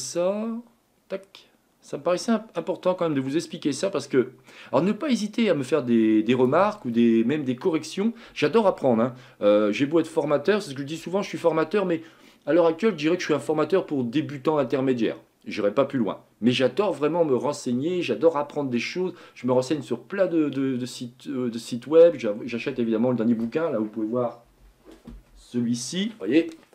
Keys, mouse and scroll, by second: 0.2-3.2 ctrl+drag.